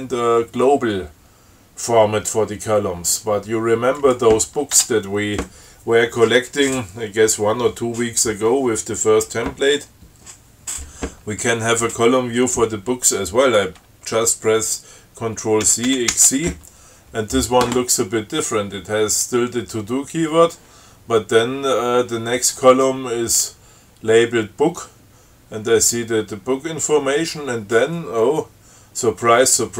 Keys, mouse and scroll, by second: 4.2 click, 5.0 Tab, 15.9 ctrl+c, 16.1 ctrl+x, 16.4 ctrl+c.